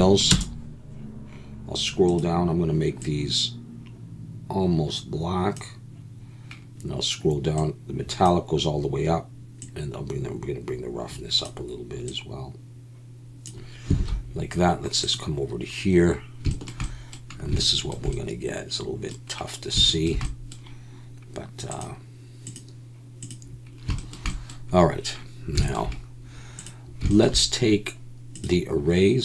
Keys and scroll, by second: 14.0 alt+a.